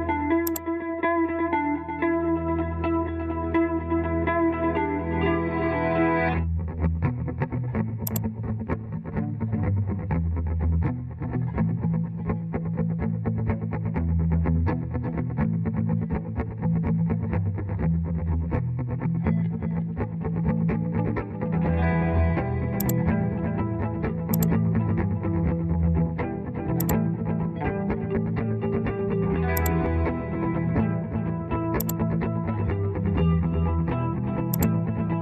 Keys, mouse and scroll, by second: 20.0 alt+r, 25.3 Escape.